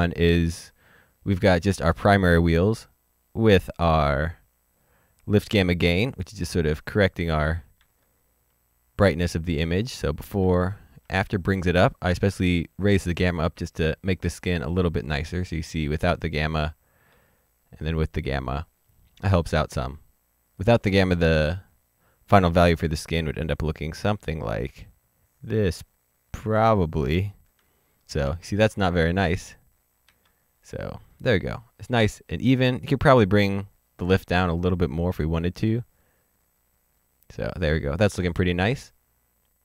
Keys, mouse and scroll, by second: 6.6 middle click, 6.6 click, 7.8 ctrl+z, 9.1 click, 10.4 ctrl+z, 15.8 z, 15.9 click, 20.5 click, 22.9 click, 28.2 ctrl+z, 29.2 ctrl+z, 30.6 z, 34.3 click.